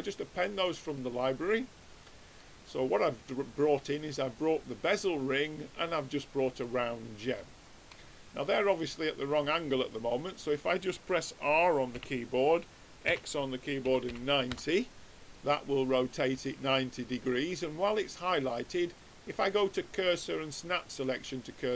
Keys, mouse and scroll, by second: 0.9-2.7 middle drag, 3.9-5.5 drag, 6.0-7.4 drag, 6.6 right click, 7.2-10.3 middle drag, 11.9 r, 15.3-17.0 middle drag, 19.2-21.1 drag, 21.6-21.7 middle drag.